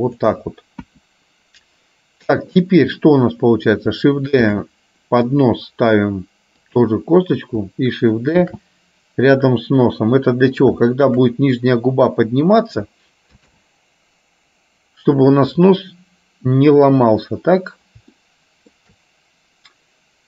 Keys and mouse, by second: 1.0 KP_1, 4.6 shift+d, 8.5 shift+d, 11.0 shift+middle click, 13.5 shift+d, 18.3 shift+middle click.